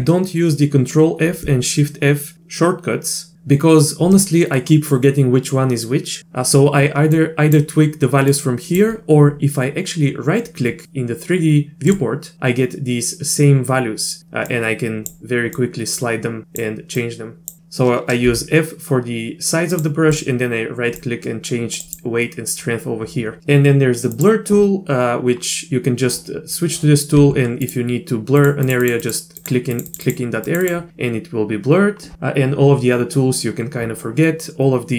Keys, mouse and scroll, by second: 7.2 click, 8.3 click, 12.1-17.6 drag, 18.3 f, 20.1-23.0 drag, 24.1 click, 27.1 f, 28.4 click, 28.6 click, 28.8 click, 29.0 click, 29.4 click, 29.7 click, 29.9 click, 30.0 click, 30.4 click, 30.6 click.